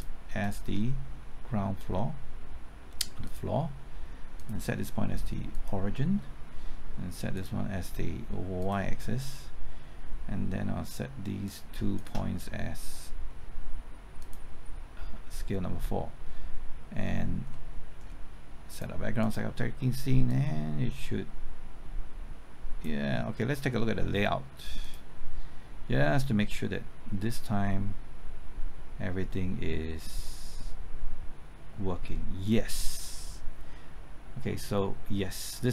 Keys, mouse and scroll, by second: 0.4 shift+click, 2.0 middle click, 3.3-8.4 drag, 12.0 shift+click, 13.1 middle click, 14.2 click, 17.5 middle click, 18.7-35.7 drag.